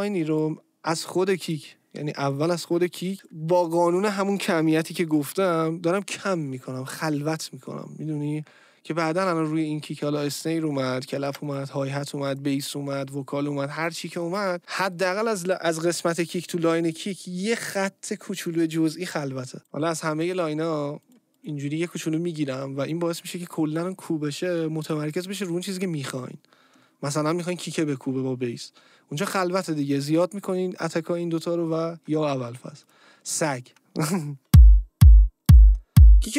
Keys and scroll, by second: 34.4 space.